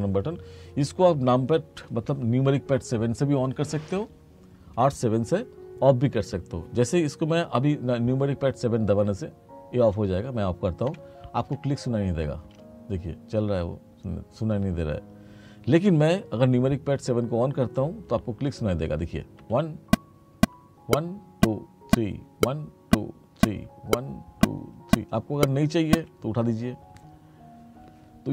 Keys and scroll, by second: 11.0 7, 12.4 space, 19.5 7, 26.1 7.